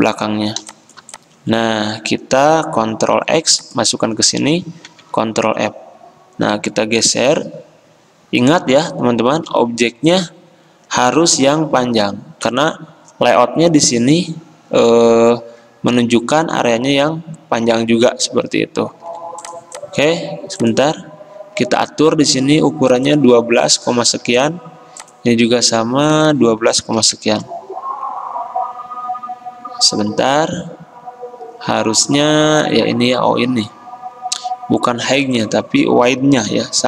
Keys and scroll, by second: 3.2 ctrl+x, 4.9 ctrl+f, 19.1 ctrl+g, 24.2 ctrl+c, 27.1 ctrl+v, 27.3 Return, 36.6 ctrl+c.